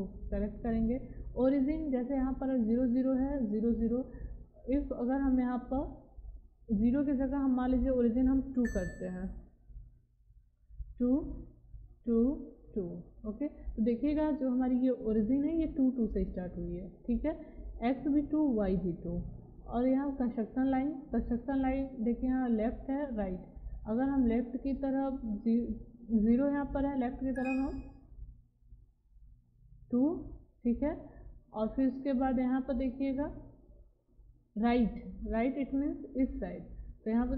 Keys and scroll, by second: 8.6 2, 10.6 2, 13.9 2.